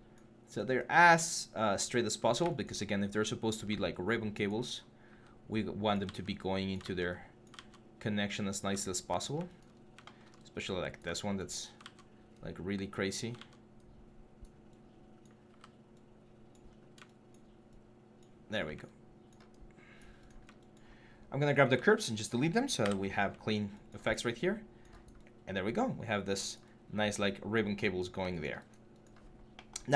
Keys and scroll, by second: 0.9 4, 3.3 e, 4.9 typing, 5.8 ctrl+z, 6.6 ctrl+z, 7.3 ctrl+z, 9.5 4, 11.6 ctrl+z, 13.2 ctrl+z, 15.3 e, 18.3 3, 22.6 Delete.